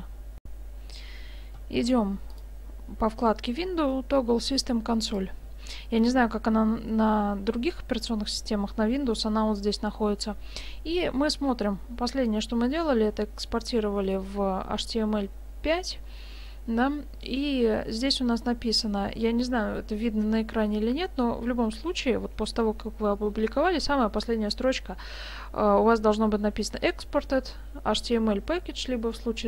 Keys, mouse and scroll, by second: 0.4 F9, 2.3 click.